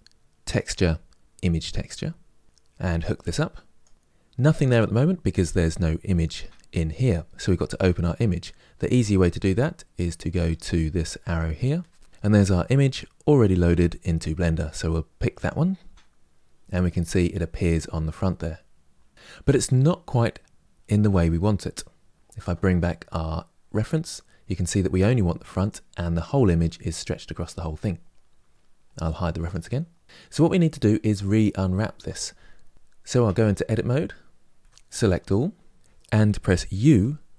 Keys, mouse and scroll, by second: 23.6 click, 29.1 click, 32.9 Tab, 34.6 a.